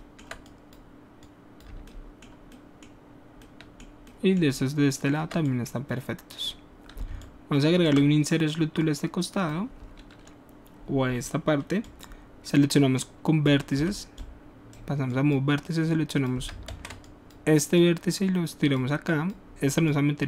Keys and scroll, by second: 13.8 w, 16.7 ctrl+z.